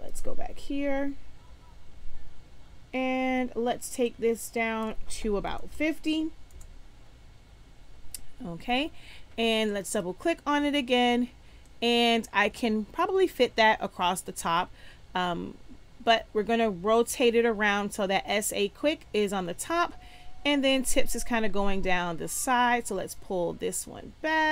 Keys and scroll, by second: 5.5 5, 5.6 0, 6.5 Return.